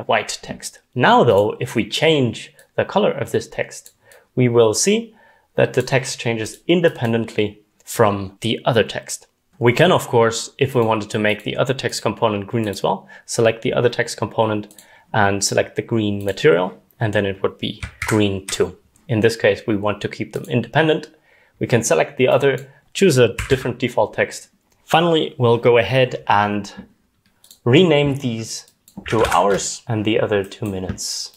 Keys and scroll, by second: 18.1 ctrl+z, 23.5 0, 24.5-25.3 typing, 28.8-30.3 typing.